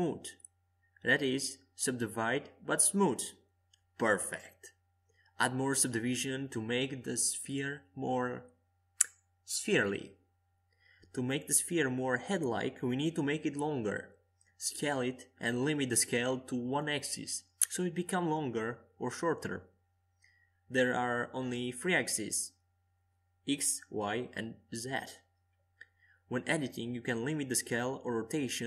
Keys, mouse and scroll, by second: 2.4-4.7 middle drag, 3.5 Tab, 4.7-6.6 scroll up 1, 4.7 s, 12.9-15.1 middle drag, 16.3-21.3 drag, 17.3-26.0 middle drag, 19.0-21.3 right drag, 25.0-27.3 drag, 27.2-28.6 middle drag.